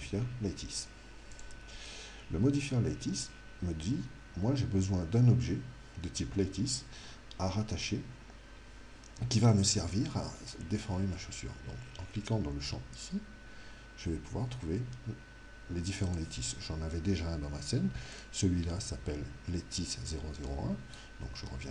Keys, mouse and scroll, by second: 13.0 click, 18.1 right click.